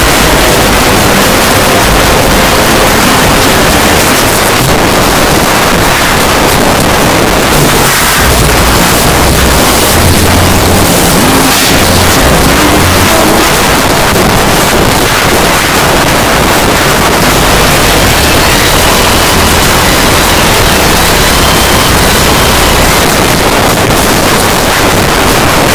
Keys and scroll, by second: 4.3 Page_Down, 13.5 Page_Down, 23.0 Page_Down.